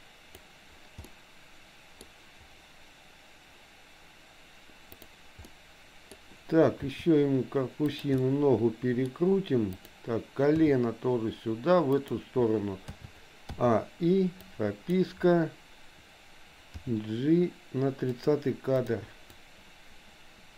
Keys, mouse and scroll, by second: 1.1 middle click, 4.9 click, 5.4 middle click, 6.9 r, 8.2-9.2 middle drag, 9.8 click, 10.6 g, 12.9 a, 13.6 i, 14.4 click, 16.8 g, 18.8 click, 19.4-20.5 drag.